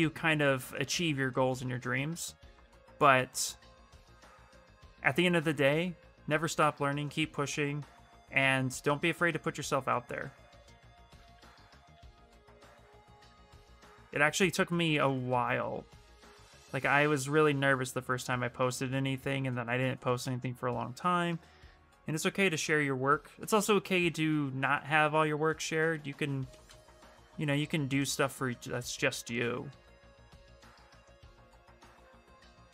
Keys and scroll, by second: 11.0 ctrl+z, 11.6 ctrl+z, 26.6 ctrl+z, 26.8 ctrl+z, 27.1 space, 32.6 w.